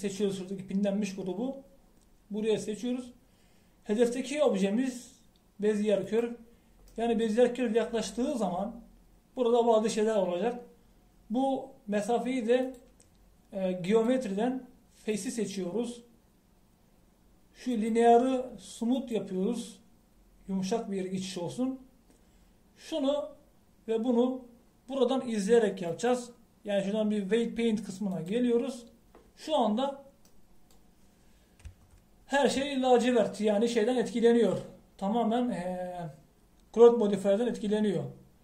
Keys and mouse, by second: 5.5-8.0 drag, 8.0-13.7 middle drag, 13.7-26.4 drag, 31.3-38.4 middle drag.